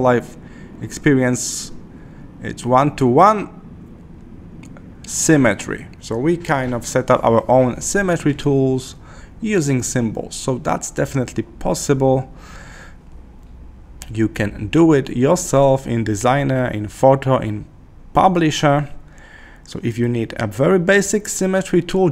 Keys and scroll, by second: 11.5 Escape, 12.0 Escape.